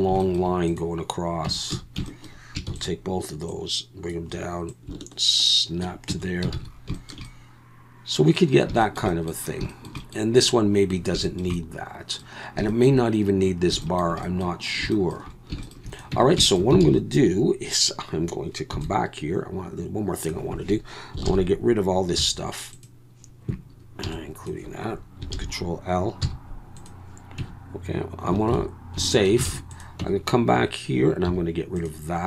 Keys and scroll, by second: 1.5 Tab, 1.7 a, 2.7 shift+d, 6.1 Tab, 6.5 alt+a, 16.1 Tab, 16.8 alt+a, 18.7 b, 21.3 ctrl+l, 22.2 x, 24.0 b, 25.3 ctrl+l, 26.2 x, 27.4 Tab, 28.5 ctrl+s, 29.5 alt+a, 30.0 Tab, 31.3 x.